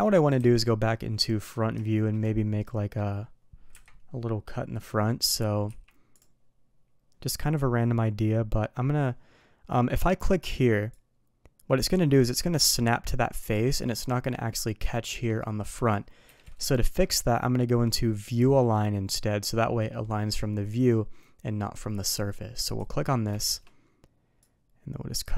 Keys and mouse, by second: 0.4 KP_1, 1.8 shift+middle drag, 2.6-3.0 middle drag, 3.7 KP_1, 5.3 click, 5.7 d, 11.0-17.5 drag, 13.7-17.5 middle drag, 16.8 KP_1, 22.6 click, 23.4 shift+middle drag, 24.4-25.3 drag.